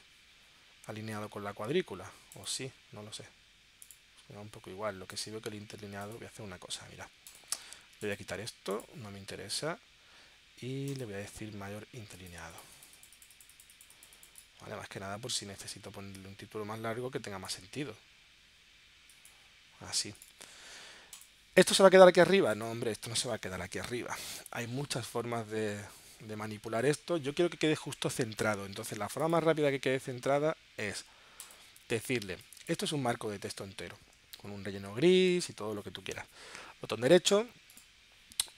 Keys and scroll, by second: 35.6 super+z.